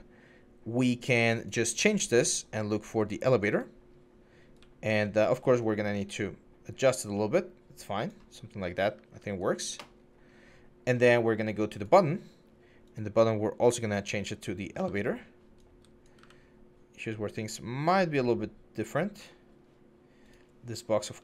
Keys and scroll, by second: 4.4-5.0 typing, 8.3-8.7 typing, 14.5-16.0 typing.